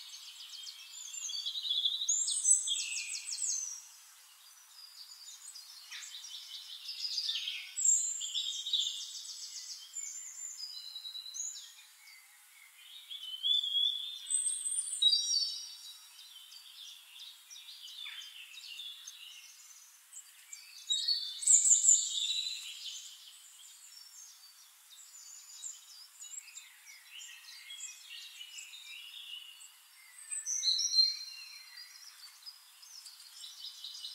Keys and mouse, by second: 1.4 ctrl+a, 2.7 click, 3.0 ctrl+a, 3.5-4.5 typing, 5.0 click, 6.3 shift+click, 7.3 click, 7.9 click, 9.0 click, 9.7 click, 10.4 ctrl+click, 10.6 ctrl+a, 11.4-13.5 drag, 14.6 drag, 15.4 click, 16.8 click, 17.8 click, 18.9 KP_5, 19.1 Return, 20.4 click, 21.2 KP_3, 21.4 Return, 23.0 click, 24.0 shift+click, 24.9-25.8 drag, 26.4 click, 27.0 drag, 28.0 shift+drag, 28.4 shift+drag, 29.5 click, 30.8-32.9 drag, 34.0 drag.